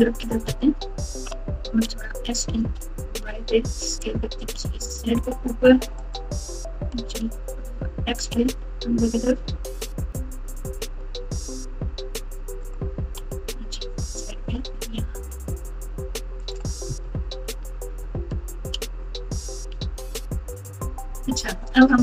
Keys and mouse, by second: 0.6-1.2 ctrl+KP_4, 1.8 s, 4.4 g, 6.9 g, 10.5 g, 13.1 g, 17.0 KP_4, 17.3 KP_4, 18.3 g, 21.2 KP_7.